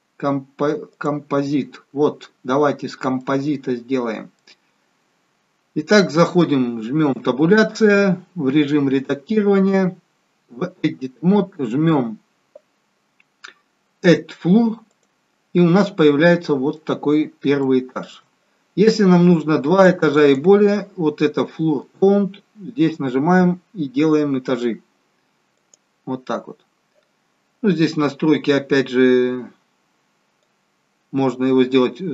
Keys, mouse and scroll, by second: 2.2-2.7 scroll down 1, 2.7-3.1 scroll up 2, 3.1 middle click, 4.8-5.4 scroll down 3, 7.1 Tab, 14.8 click, 15.8 middle click, 17.6 shift+middle click, 19.7 click, 20.1 click, 23.5-24.2 scroll down 3, 25.5 click, 30.6 click.